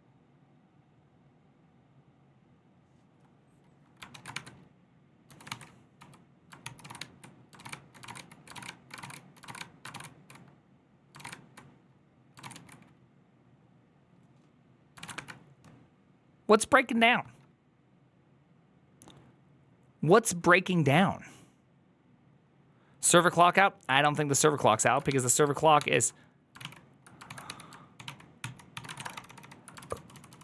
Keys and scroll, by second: 5.1-9.5 typing, 6.5 ctrl+c, 6.7 ctrl+a, 9.8 ctrl+shift+a, 10.5 ctrl+shift+a, 11.1 ctrl+a, 12.3 ctrl+a, 12.4 ctrl+a, 14.9 ctrl+a, 15.0 1, 25.6 ctrl+a, 25.6 1, 25.7 ctrl+h, 26.4 ctrl+w, 26.5 ctrl+o, 27.1 ctrl+w, 27.3 h, 27.9 ctrl+w, 27.9 ctrl+o, 28.3 ctrl+t, 28.5-30.4 typing.